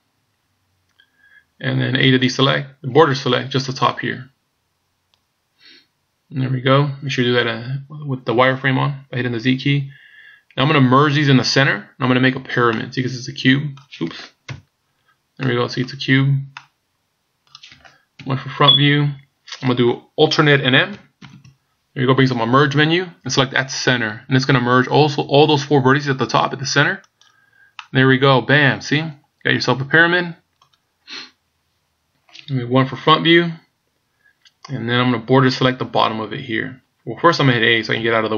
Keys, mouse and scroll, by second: 2.1 a, 3.0 b, 12.8 middle click, 14.5 KP_Decimal, 15.5 middle click, 16.1 scroll down 3, 16.6 middle click, 18.2 KP_1, 21.2 alt+m, 27.8 middle click, 30.9 scroll down 1, 32.8 KP_1.